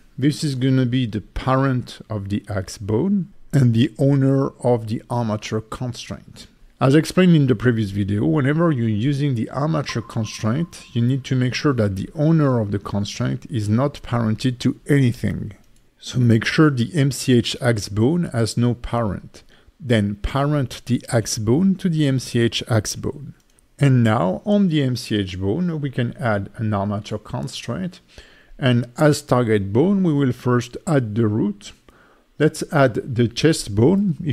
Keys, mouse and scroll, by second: 7.4 Tab, 8.6 click, 12.0-13.6 scroll up 3, 14.8 click, 16.0 shift+click, 16.4 Tab, 19.1 ctrl+p, 19.9 Tab, 21.5 click, 23.3 click, 24.1 click, 27.7 click, 28.4 click, 28.9 click, 29.9 click, 31.6 click, 32.2 click, 32.5 click, 33.0 click, 33.6 click.